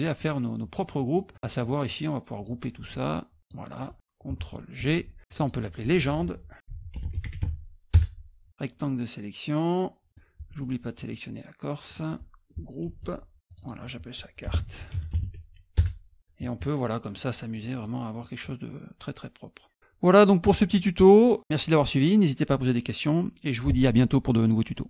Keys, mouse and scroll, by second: 0.8 middle click, 1.3-2.4 drag, 2.9 shift+click, 4.8 ctrl+g, 5.3 click, 5.4 click, 6.4-7.9 typing, 7.9 Return, 8.5-10.1 drag, 10.1 middle click, 10.6-11.9 shift+drag, 13.5 click, 13.6 click, 14.2-15.7 typing, 15.7 Return.